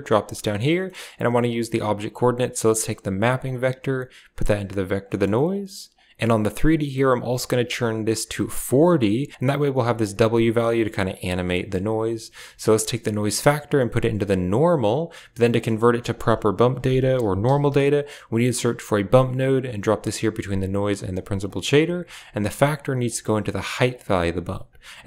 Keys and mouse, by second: 0.4 middle click, 0.8 middle click, 2.3 click, 3.4-4.7 drag, 5.0 middle click, 5.9 drag, 6.4-8.7 drag, 9.3-10.5 drag, 11.0 click, 11.4 middle drag, 13.1-15.1 drag, 15.9 shift+a, 21.4 drag, 22.1 drag, 23.1 click, 24.0 click.